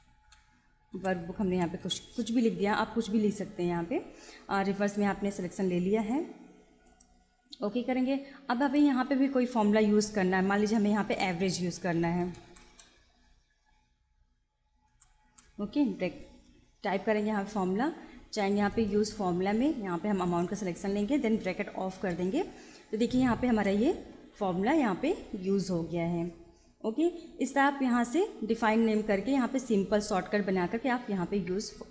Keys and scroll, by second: 0.0-1.9 typing, 11.0-13.2 typing, 14.9 g, 15.3 e, 16.2 shift+9, 21.9 shift+0, 23.5 Return.